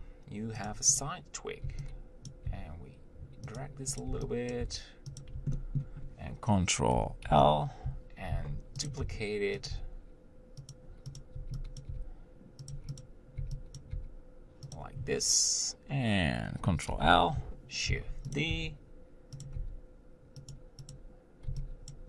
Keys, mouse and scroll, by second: 1.2 click, 2.5 b, 2.7 g, 4.3 click, 4.3 b, 4.8 g, 5.8-7.5 shift+middle drag, 7.5 ctrl+l, 8.6 shift+d, 9.3 r, 10.0 g, 11.4 click, 12.1 b, 13.3 click, 14.0 b, 14.2 g, 17.1 ctrl+l, 18.1 shift+d, 18.7 r, 19.8 g, 21.1 click.